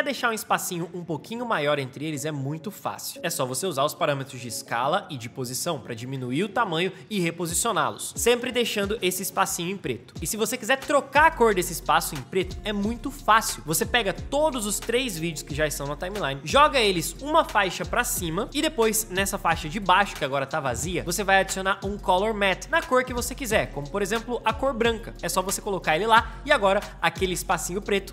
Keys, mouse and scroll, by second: 3.3 Down, 6.0 Down, 25.1 space.